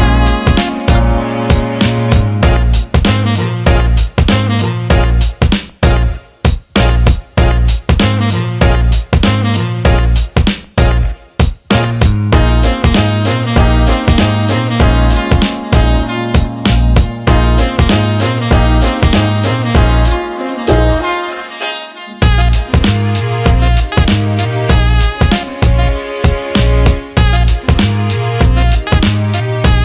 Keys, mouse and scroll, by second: 0.0 click, 0.2 click, 0.4 click, 1.2 alt+middle click, 1.7 alt+middle click, 2.4 alt+middle click, 4.1 alt+middle drag, 4.5 shift+a, 8.1 alt+middle click, 9.7 click, 11.7 s, 11.9 alt+middle click, 12.9 click, 13.5 alt+middle click, 14.4 click, 15.1 alt+middle click, 16.2 alt+middle click, 17.0 click, 18.5 click, 19.8-21.1 drag, 22.2-23.8 drag, 25.5 alt+middle click, 26.6-27.7 drag, 27.8 alt+middle click, 29.6 click.